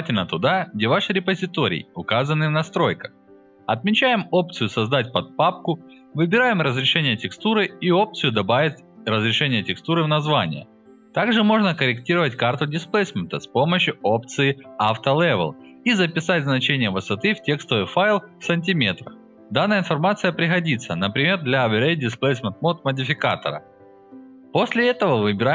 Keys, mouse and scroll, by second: 1.2 click, 5.0 click, 5.7 click, 8.5 click, 11.8 click, 21.5 click, 22.6 click, 23.7 click, 24.6 middle click, 24.6 scroll up 1.